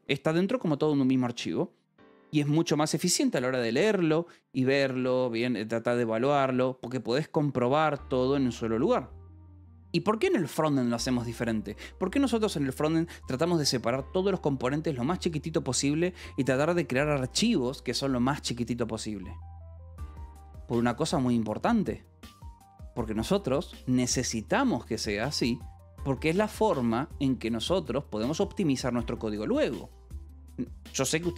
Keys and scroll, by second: 27.6 j.